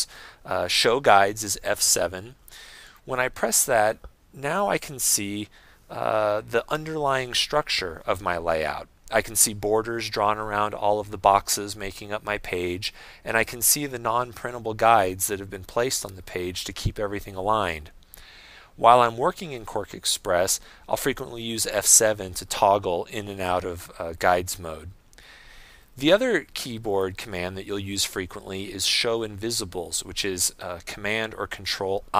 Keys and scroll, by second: 4.6 F7, 23.2 F7, 25.8 F7.